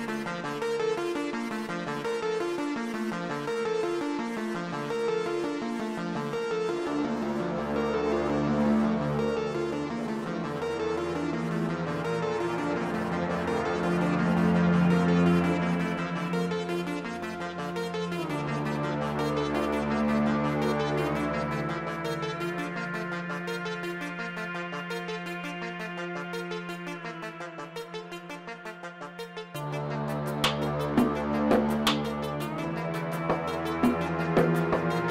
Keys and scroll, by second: 1.4 Return, 1.8 shift+z, 5.4 ctrl+r, 12.3 3, 13.0 shift+s, 23.3 shift+a, 26.3 s, 26.6 shift+z, 28.2 s, 29.8 shift+z, 31.1 f, 32.9 ctrl+z, 33.4 g.